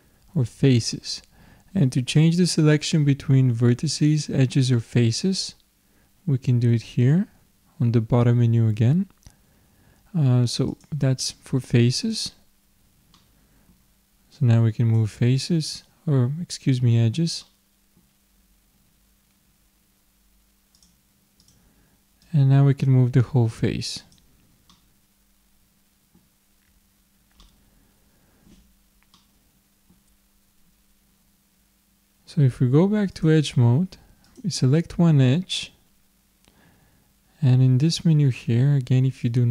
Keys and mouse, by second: 10.7-13.7 drag, 13.7 middle click, 14.4-16.2 drag, 17.4-19.3 drag, 20.7-24.1 drag, 24.7-32.1 middle drag, 33.1-36.1 drag, 39.2 click.